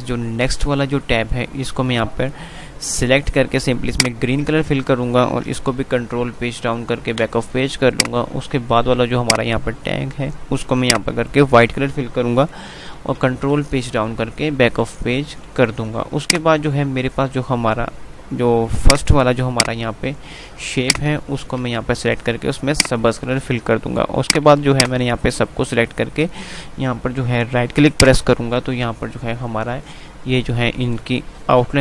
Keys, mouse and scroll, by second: 4.2 click, 5.8 Page_Down, 8.1 click, 10.7 click, 13.3 Page_Down, 15.6 ctrl+z, 16.5 click, 20.7 click, 21.6 z, 22.8 click, 24.5-28.0 drag, 28.0 right click.